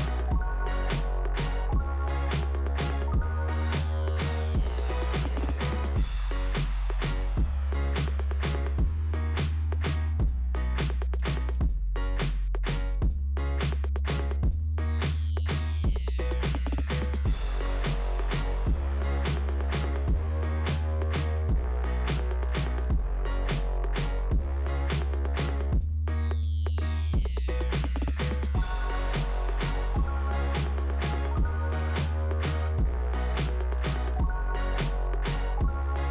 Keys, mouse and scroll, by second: 5.0 click, 18.3 click, 27.2 middle click.